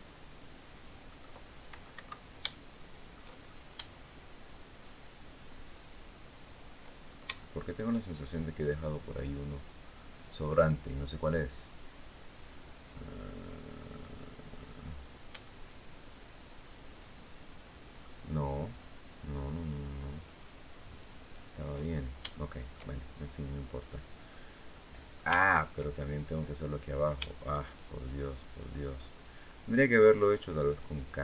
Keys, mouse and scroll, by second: 0.8 click, 1.7 Escape, 2.2 shift+click, 3.1-3.5 shift+scroll up 1, 4.4 shift+right click, 6.8 shift+scroll down 1, 7.1 shift+middle click, 8.0 shift+scroll up 1, 15.2-17.9 shift+middle drag, 20.0 shift+right click, 20.6 shift+right click, 21.6-22.0 shift+scroll down 1, 22.0 shift+middle click, 23.3 middle click, 24.4 middle click, 25.2 shift+middle click, 25.7-26.3 shift+scroll up 1, 27.4 shift+right click, 28.2 shift+right click, 29.8 shift+right click, 30.4 shift+right click.